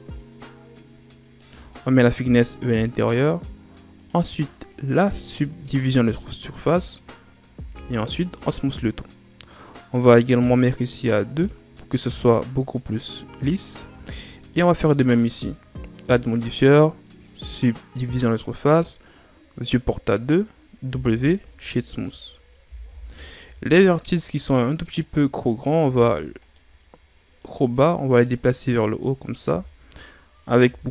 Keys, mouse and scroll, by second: 1.7-3.9 middle drag, 3.9-6.1 drag, 6.1-7.5 middle drag, 7.5 w, 11.2-13.5 drag, 13.5-14.2 scroll down 3, 14.2 right click, 16.0-19.0 drag, 19.6-20.8 drag, 20.8 w, 22.6 ctrl+s, 23.3-23.6 scroll up 1, 23.6 middle click, 24.3-24.9 scroll up 1, 24.9 right click, 25.7 Tab, 26.3 right click, 27.3 right click, 28.2-29.4 drag, 29.4 Tab, 30.6 Tab.